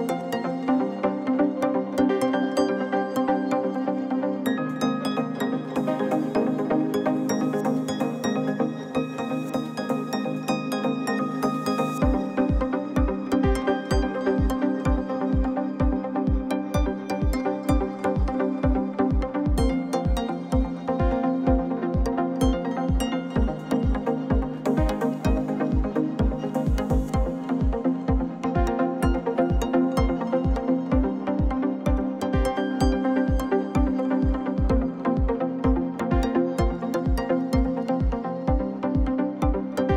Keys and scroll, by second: 0.0 r, 0.2 9, 0.3 Return, 0.6 g, 1.8 s, 3.7 r, 3.8 9, 3.9 Return, 4.4 g, 5.5 alt+a, 5.8-8.3 typing, 6.6 alt+a, 7.6 alt+a, 8.9 ctrl+z, 9.4 alt+a, 9.6-17.6 typing, 11.3 alt+a, 12.3 alt+a, 13.4 alt+a, 14.5 alt+a, 15.6 alt+a, 16.7 ctrl+z, 17.3 ctrl+z, 18.4 alt+a, 18.7-22.3 typing, 19.5 alt+a, 20.7 alt+a, 21.9 alt+a, 23.4 alt+a, 23.8-30.0 typing, 25.0 alt+a, 26.2 alt+a, 27.5 alt+a, 28.6 alt+a, 29.6 alt+a, 31.1 alt+a, 31.4 l, 31.6 g, 33.0 alt+a, 33.5 l, 33.9 g, 35.1 alt+a, 35.4-37.9 typing, 36.2 alt+a, 37.3 alt+a, 38.8 alt+a, 39.1 l, 39.3 g.